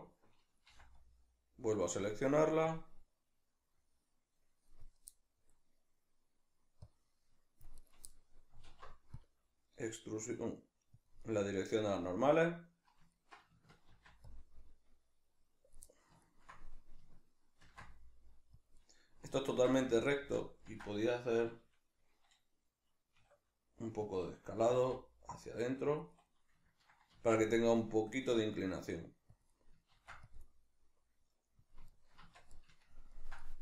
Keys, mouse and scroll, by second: 0.7 c, 7.9 right click, 8.1-11.1 middle drag, 8.7 alt+e, 11.1 click, 11.2-13.1 middle drag, 13.9 ctrl+r, 15.7 click, 15.9 middle click, 17.6 ctrl+r, 18.7 click, 18.7-24.1 middle drag, 19.5 ctrl+z, 24.1 click, 24.7 g, 26.0 click, 27.1 ctrl+r, 29.4 click, 29.5-31.7 middle drag, 29.9 ctrl+r, 31.7 click, 32.2 Tab, 32.5 middle click.